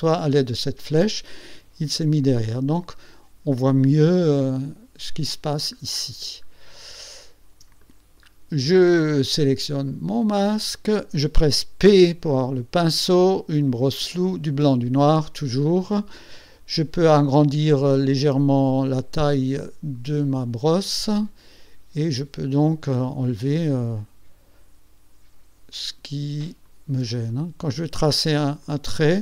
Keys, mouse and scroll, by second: 0.5 click, 2.4-4.2 middle drag, 4.2-6.0 drag, 6.5-7.0 ctrl+scroll up 4, 7.4 ctrl+scroll down 1, 7.9 ctrl+middle click, 8.2 click, 8.3 middle click, 9.9 click, 12.0 p, 20.0 click, 21.0-26.2 drag, 26.7 shift+click, 27.4 shift+click, 28.7 click.